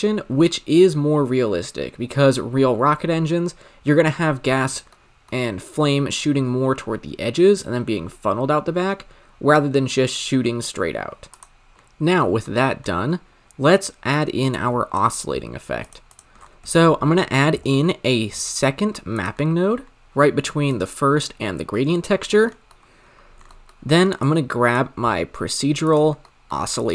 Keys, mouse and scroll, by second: 4.2-4.9 scroll up 3, 4.9-8.4 shift+middle drag, 11.3-14.9 drag, 16.0-19.2 drag, 19.2 shift+a, 24.2 click, 26.7-26.9 drag.